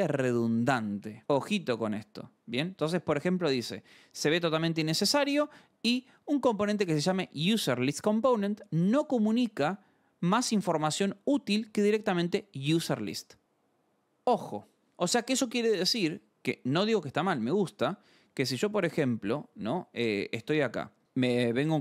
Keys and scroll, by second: 20.8-21.8 typing.